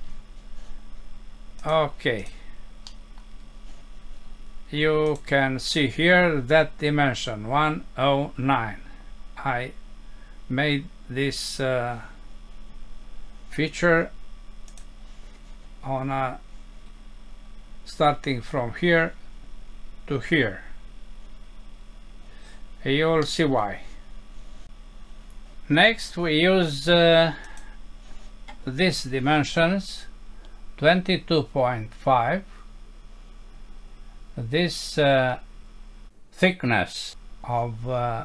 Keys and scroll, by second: 2.9 F6, 23.2 F6.